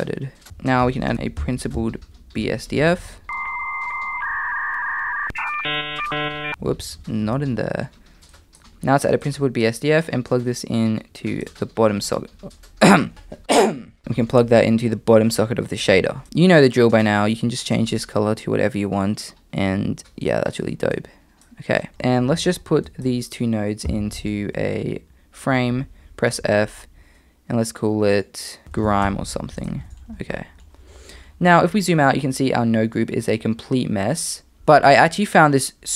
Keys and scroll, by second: 0.4 shift+a, 1.1 Escape, 1.1 shift+a, 6.9 super+z, 7.3 super+z, 23.9 f, 28.6 BackSpace.